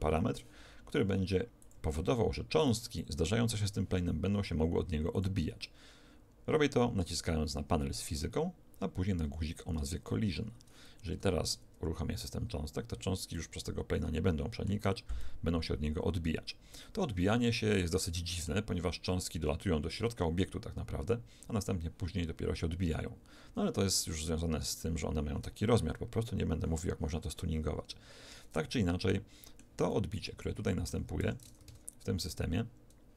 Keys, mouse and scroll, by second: 1.6 click, 5.0 click, 11.0 alt+a, 13.3-17.0 middle drag, 28.5-31.6 middle drag, 31.2 Escape, 31.6 alt+a.